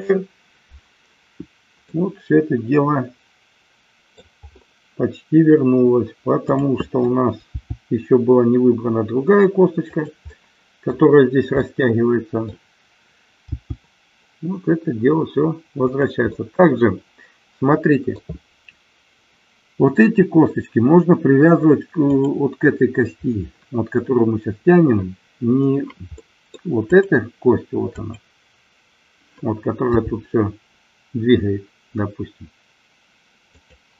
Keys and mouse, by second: 1.9-4.3 middle drag, 7.7 g, 10.0 click, 10.4-11.0 middle drag, 11.8 middle click, 13.7 g, 15.9 click, 16.4-18.3 middle drag, 22.0-23.3 drag, 26.3 middle click, 26.9-28.2 drag, 30.2 g, 33.7 click.